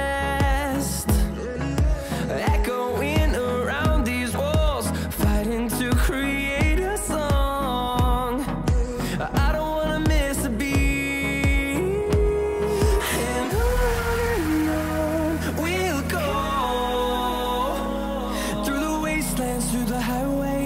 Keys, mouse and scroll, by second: 0.8 click, 9.5-15.3 drag, 15.3-16.8 scroll up 1, 16.8-20.6 drag.